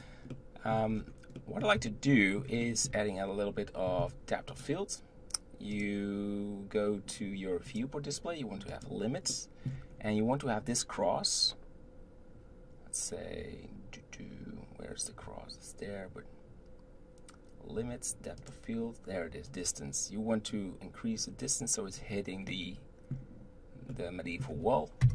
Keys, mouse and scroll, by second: 0.3-0.9 middle drag, 0.9-1.4 scroll down 4, 1.4-4.5 middle drag, 4.5 click, 5.7 click, 7.7 click, 8.7 click, 9.3-9.9 middle drag, 9.9-10.2 scroll up 2, 18.4 click, 19.5-22.5 drag, 22.5-25.0 middle drag, 25.0 KP_0.